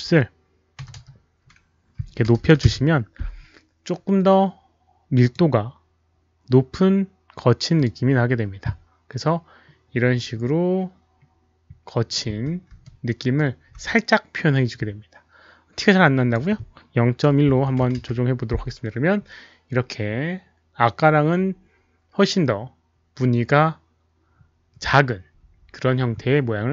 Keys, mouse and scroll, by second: 0.0-0.7 typing, 0.7 Caps_Lock, 0.7 click, 1.9 Tab, 2.2 KP_2, 2.4 KP_0, 2.6 Return, 5.2 Tab, 5.2 click, 5.2 BackSpace, 7.7 click, 10.9-11.2 scroll down 1, 11.5 Return, 11.5 Tab, 11.5 click, 11.5 KP_0, 11.5 KP_2, 12.8-13.3 alt+middle drag, 13.0 Return, 13.0 click, 13.0 KP_0, 15.9 click, 17.4 click, 17.4 alt+middle click, 17.4-19.2 typing, 18.3 Return, 18.5 click, 18.5 alt+middle click, 19.2 Return, 19.2 click, 19.2 alt+middle click, 25.0 Return, 26.3 Return, 26.3 KP_1, 26.3 KP_Decimal, 26.3 KP_0.